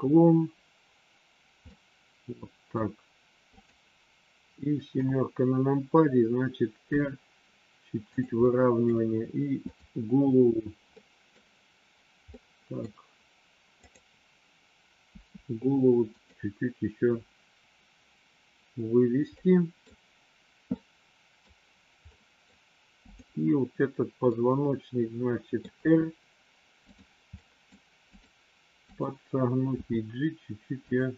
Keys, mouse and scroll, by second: 1.6-2.8 middle drag, 4.9 KP_7, 6.9 r, 8.4 middle click, 9.5 click, 10.9 middle click, 12.4 middle click, 15.0 r, 17.0 KP_1, 19.3 middle click, 20.6 middle click, 22.0 middle click, 23.0 click, 24.3-25.5 middle drag, 25.6 r, 27.4 middle click, 28.0-29.4 drag, 29.6 g.